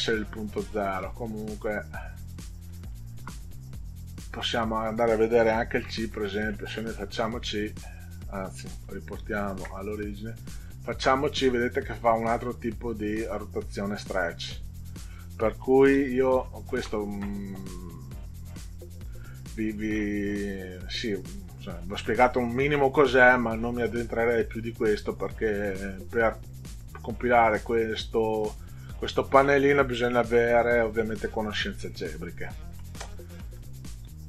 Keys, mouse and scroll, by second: 1.7 click, 3.3 0, 4.5 click, 5.8 1, 7.2 click, 9.2 ctrl+z, 10.7 click, 13.1 click, 15.9 ctrl+z, 16.4 ctrl+z, 22.1 middle click, 31.2-31.6 scroll down 2, 33.6 middle click.